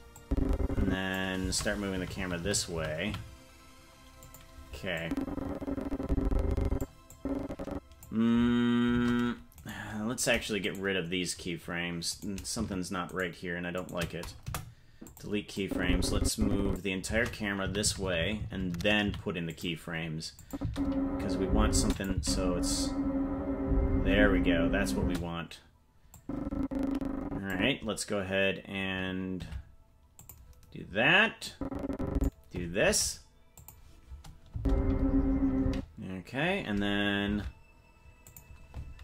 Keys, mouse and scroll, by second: 0.2 click, 1.6 shift+`, 5.0-6.8 drag, 7.1 click, 8.9 shift+`, 10.6 right click, 12.2 right click, 13.1 shift+right click, 13.8 shift+right click, 14.4 Delete, 15.6-16.8 drag, 17.2 shift+`, 20.4 click, 20.6 space, 21.8 space, 22.0 click, 22.1 space, 25.0 space, 26.2-27.6 drag, 29.5 shift+`, 31.5 click, 32.9 shift+`, 34.5 space, 35.7 space, 37.3 shift+`.